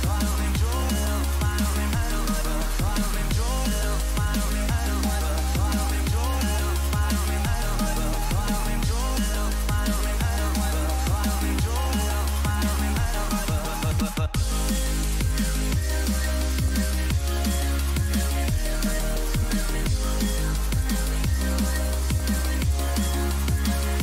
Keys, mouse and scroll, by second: 14.8 a, 15.3-18.2 middle drag, 19.3 z, 20.9-22.8 drag, 21.7-24.0 right drag, 23.3-24.0 drag, 23.3-24.0 middle drag.